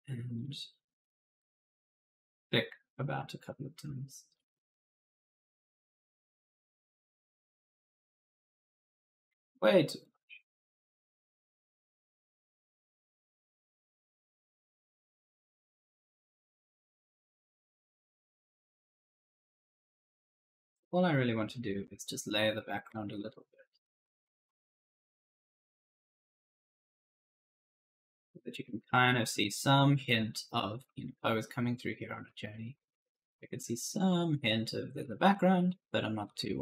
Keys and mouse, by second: 1.4-3.3 typing, 1.5 right click, 2.5 click, 2.9 right click, 4.9 click, 5.4 right click, 7.8 click, 9.2 ctrl+z, 9.9 click, 11.8 right click, 12.0 right click, 12.3 right click, 12.7 click, 13.0 right click, 13.9 click, 14.3 right click, 15.2 click, 16.5-18.4 typing, 16.6 right click, 19.0 click, 19.5 right click, 19.7 w, 20.6 a, 21.7 s, 22.4 w, 23.0 right click, 23.9-36.6 typing, 25.8 right click, 28.2 right click, 31.1 right click.